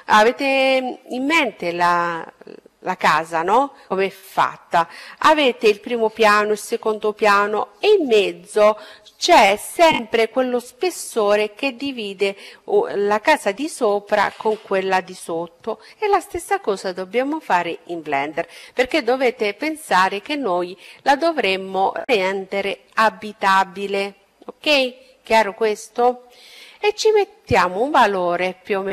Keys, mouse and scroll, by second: 25.7-27.5 drag.